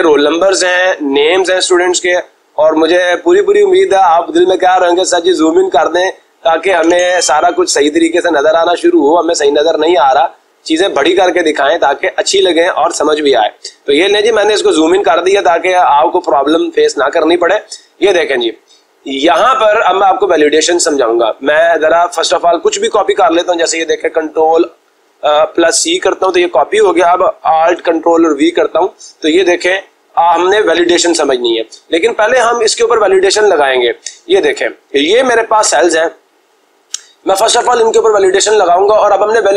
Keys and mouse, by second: 0.6 click, 1.4 click, 4.7 click, 5.0 click, 5.6 click, 6.6 click, 7.5 click, 9.9 click, 12.2 click, 13.7 click, 14.3 click, 18.1 click, 23.6 click, 26.0 ctrl+c, 32.2-33.3 drag, 33.3 Escape, 36.9-37.9 drag.